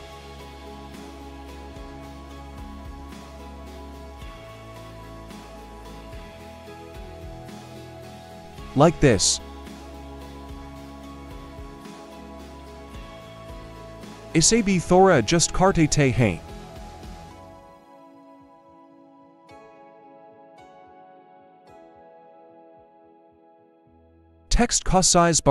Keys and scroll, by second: 8.6 alt+Return, 18.3 Return, 19.4 ctrl+z, 20.1 ctrl+shift+z, 21.2 ctrl+-, 24.5-25.2 typing.